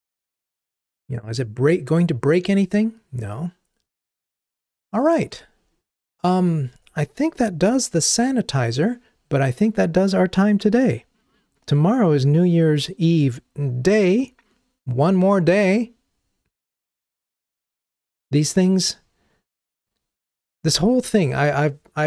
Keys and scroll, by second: 5.4 ctrl+Tab.